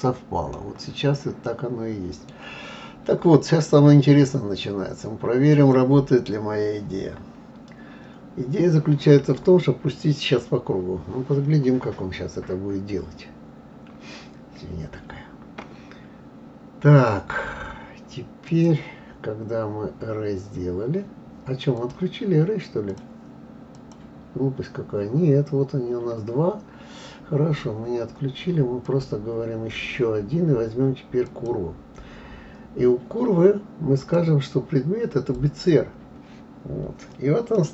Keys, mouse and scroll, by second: 0.6-1.4 scroll down 3, 1.4-3.4 middle drag, 3.4-5.2 scroll down 2, 5.5 click, 18.4-21.5 drag, 21.7 click, 22.9-23.9 drag, 28.8-31.8 drag, 34.0-35.7 drag, 37.5 scroll down 1, 37.5-37.7 middle drag.